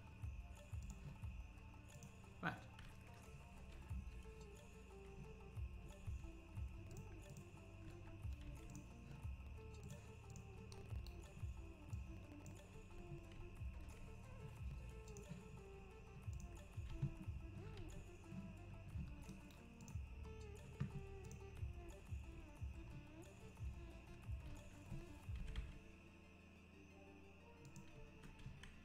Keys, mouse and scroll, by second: 3.6 alt+h, 6.1 scroll up 1, 7.0 click, 7.9 Tab, 8.7 click, 9.9 click, 12.0 click, 12.8 Tab, 13.1 scroll down 6, 13.4 `, 14.1 Tab, 15.5 click, 15.5-16.3 scroll down 5, 16.3 click, 17.0 ctrl+s, 17.4-17.8 scroll up 3, 18.7 ctrl+s.